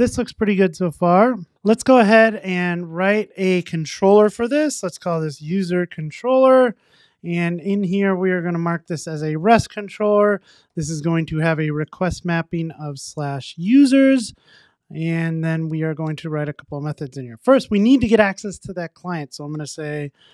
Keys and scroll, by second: 9.1 Return, 12.7 Tab.